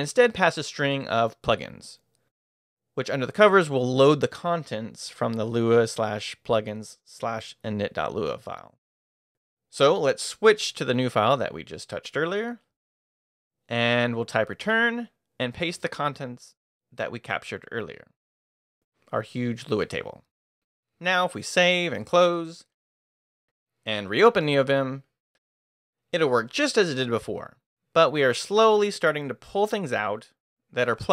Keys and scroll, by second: 0.0-1.2 typing, 2.8 Left, 3.1-6.2 typing, 4.9 Escape, 10.5-11.4 typing, 11.9 Up, 12.6 Return, 14.0-16.3 typing, 15.7 Escape, 17.6 Escape, 18.1 shift+;, 18.8 shift+w, 19.0 Return, 20.8 Escape, 21.2 shift+;, 21.5 shift+w, 22.3 q, 22.9 a, 26.4 Return, 29.7-31.1 typing.